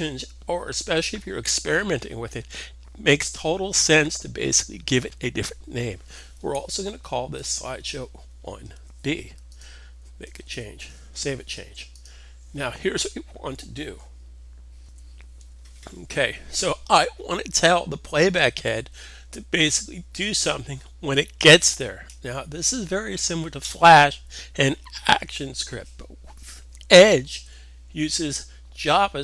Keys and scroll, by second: 8.7 b, 10.7 super+s, 14.7 super+Tab, 14.7 super+c.